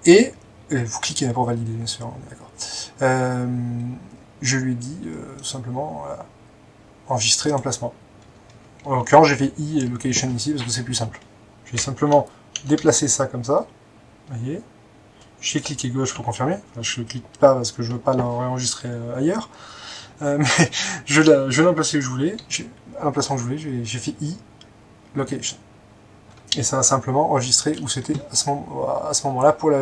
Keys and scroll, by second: 1.1 typing, 8.9 i, 11.8 Escape, 12.6 typing, 16.2 Escape, 22.4 i.